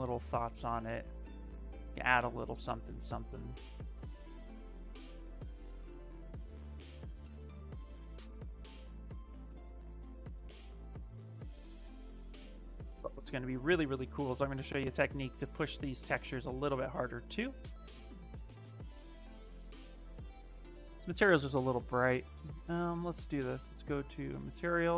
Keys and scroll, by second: 8.6 s.